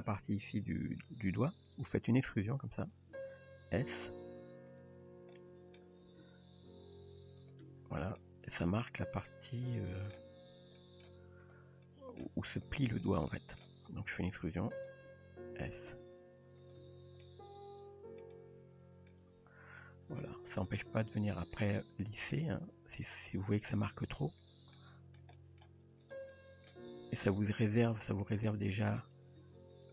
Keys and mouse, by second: 2.3 e, 3.2 s, 4.2 g, 5.4-5.8 middle drag, 6.0 r, 7.7 Tab, 8.2-8.6 middle drag, 9.3-10.2 middle drag, 10.4 Tab, 10.8 middle drag, 11.5 drag, 11.9-12.2 middle drag, 12.5 click, 13.3 middle click, 14.4 e, 15.1 s, 15.9 g, 16.9 Tab, 17.2-18.2 middle drag, 18.3-19.1 middle drag, 19.3 Tab, 20.7-21.2 drag, 21.5 click, 22.3 click, 22.5 g, 23.9 g, 24.8-25.2 middle drag, 25.4 middle drag, 26.0 click, 26.3 middle click, 26.9 g, 27.8 click, 28.1 middle click, 28.8 click, 29.4 g.